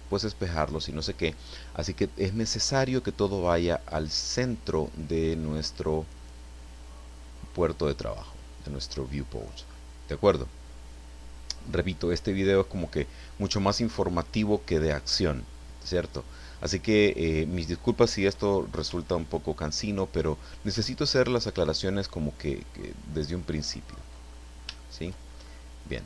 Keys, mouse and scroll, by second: 5.5-9.5 middle drag, 9.6 scroll up 1, 9.9 middle click, 10.8-11.1 scroll down 1, 11.1-13.6 middle drag, 20.2-24.1 ctrl+drag, 24.7 shift+middle click, 25.3-25.7 shift+scroll up 3.